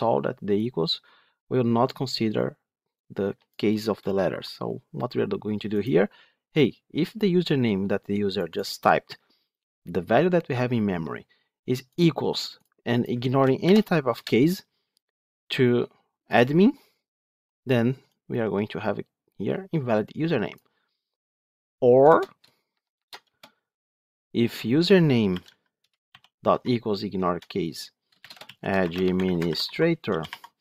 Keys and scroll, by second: 14.1 Return, 25.7 Return.